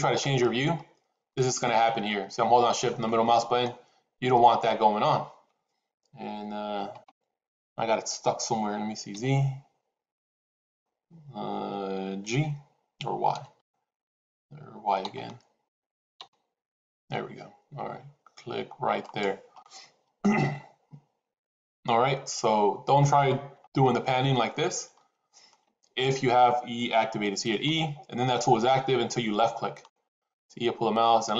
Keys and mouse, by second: 23.5-25.4 shift+middle drag, 27.5 e.